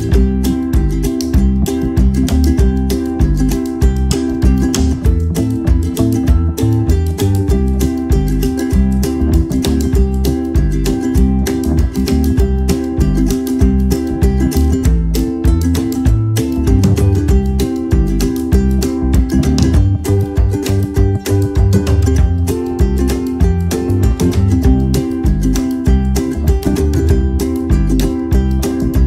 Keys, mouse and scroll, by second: 0.3 click, 2.7 click, 7.1 ctrl+c, 8.3 click, 13.0 alt+scroll up 1, 13.8 alt+shift+click, 15.1 alt+click, 16.0 alt+scroll up 1, 16.1 alt+scroll down 1, 17.0 click, 17.5 scroll down 1, 18.4 right click, 19.4 click, 21.1 click, 23.7 click, 26.5 space, 26.7 click, 26.9 space, 27.8 click.